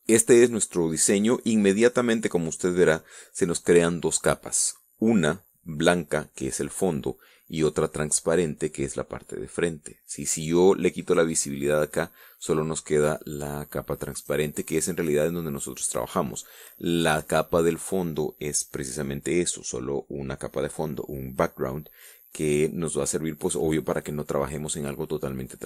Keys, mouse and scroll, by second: 0.2 scroll down 2, 11.3 click, 14.4 click.